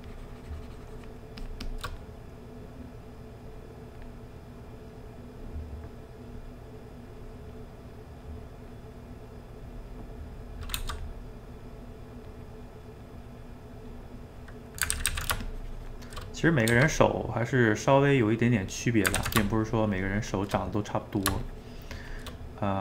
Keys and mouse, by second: 2.0-3.4 middle drag, 3.4 click, 4.2-6.7 middle drag, 6.7 click, 7.5-9.2 middle drag, 9.2 click, 9.8 middle click, 10.8 f, 11.2 middle click, 11.6 click, 12.5 middle click, 13.4 click, 14.1 middle click, 15.0 ctrl+z, 15.1 ctrl+z, 15.5 shift+click, 16.3 middle click, 16.7 f, 17.1-18.3 middle drag, 18.3 click, 19.2 ctrl+z, 19.5-20.6 shift+drag, 20.6 middle click, 21.5 shift+click, 22.4-22.8 middle drag.